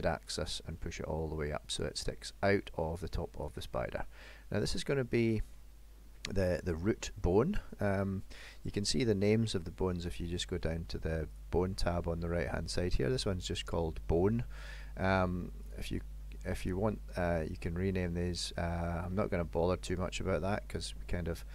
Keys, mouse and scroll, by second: 4.1 middle click, 11.4 click, 15.7 click, 16.8 middle click, 18.0 scroll up 2, 18.7 shift+middle click, 19.5 middle click.